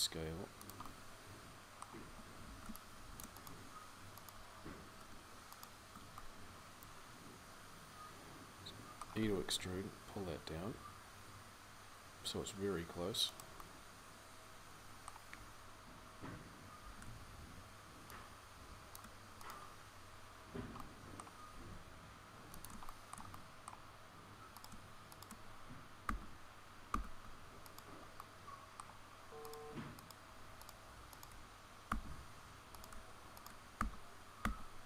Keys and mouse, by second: 2.2 c, 13.6 middle click, 13.8 middle click, 14.5 middle click, 15.1-16.6 middle drag, 16.6 c, 20.7 middle click, 21.3 g, 22.9-25.8 middle drag, 25.8 f, 26.7 f, 31.6 f, 33.6-34.8 f.